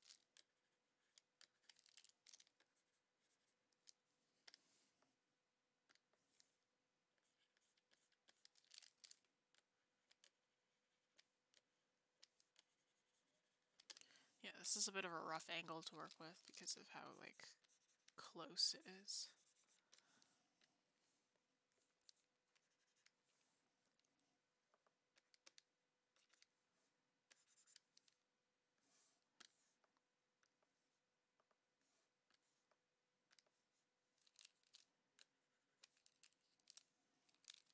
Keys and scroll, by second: 31.4 ctrl+z.